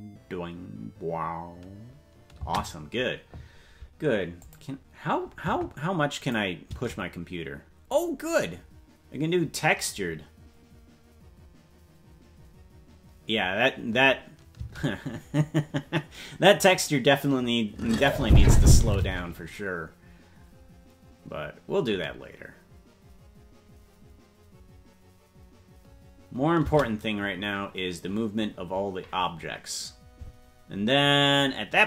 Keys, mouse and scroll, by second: 2.4 space, 4.6 click, 6.2 click, 6.7 space, 14.5 space, 18.0 click, 19.0 space, 26.6 space.